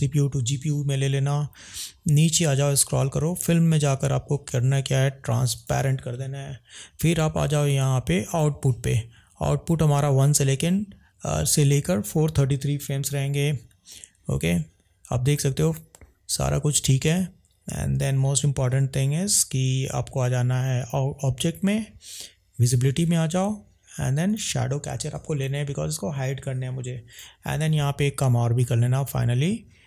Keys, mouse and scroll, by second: 3.4 click, 5.6 click, 8.2 click, 22.6 click, 24.3 click, 27.1 click.